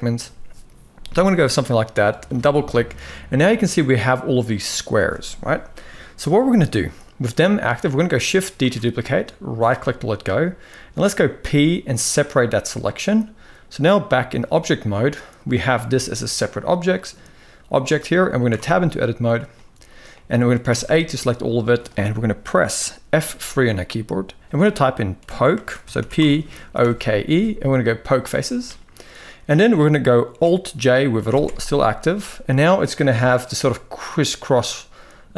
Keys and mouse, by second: 8.3 shift+d, 11.1 p, 13.8 click, 15.6 g, 18.2 Tab, 19.2 middle click, 19.8 middle click, 20.4 a, 21.2-21.5 shift+middle drag, 22.9 F3, 28.9 middle click, 31.0 alt+j, 32.8 KP_1.